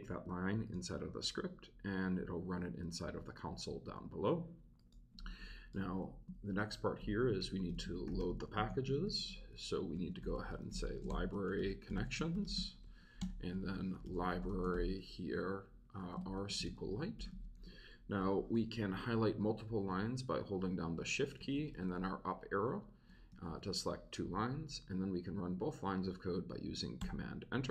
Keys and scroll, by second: 5.7 Return, 6.3 shift+Return, 6.8-17.8 typing, 13.2 Return, 17.9 Right, 20.5 shift+Up, 21.0 shift+Left, 21.9 shift+Left, 22.4 shift+Left, 23.6 shift+Left, 27.0 super+Return.